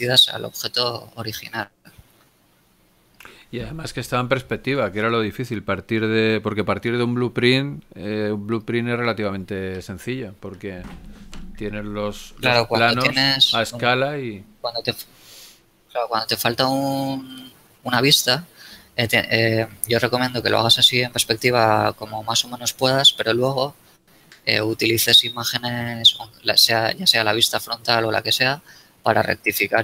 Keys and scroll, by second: 15.7 KP_1, 23.3 z, 29.5 ctrl+z.